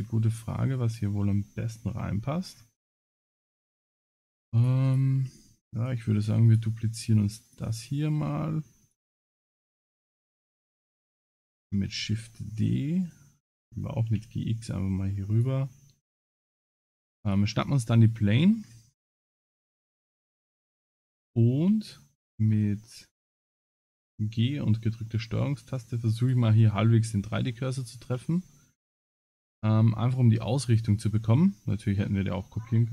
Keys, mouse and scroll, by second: 0.0-0.4 scroll down 5, 1.9 KP_Decimal, 2.5 scroll down 8, 2.9 scroll up 3, 3.8 click, 3.8 scroll up 3, 4.6 click, 5.1 g, 6.5 shift+click, 6.6 shift+click, 7.5 shift+click, 11.3-12.2 scroll down 12, 12.2 shift+d, 14.1 g, 15.7 shift+middle click, 17.3 click, 18.0 shift+middle click, 18.5-18.9 scroll down 7, 18.9-19.6 scroll up 6, 19.6 shift+middle click, 21.0 shift+middle click, 22.6 scroll up 3, 23.1 scroll down 2, 23.8 g, 26.8 middle click, 27.8 shift+middle click, 28.4 scroll up 2, 28.8 scroll down 3, 29.3 middle click.